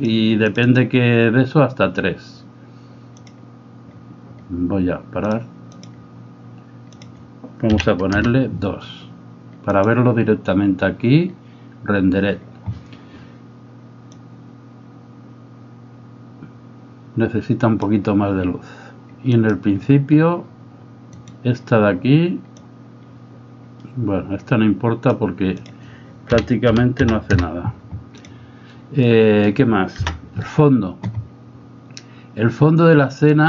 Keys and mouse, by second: 5.8 click, 7.1-8.6 drag, 9.8 click, 14.1-17.9 drag, 19.4 click, 21.2 right click, 22.7-25.1 drag, 25.6-27.8 drag, 29.0 middle click, 30.0 KP_0, 33.2 click.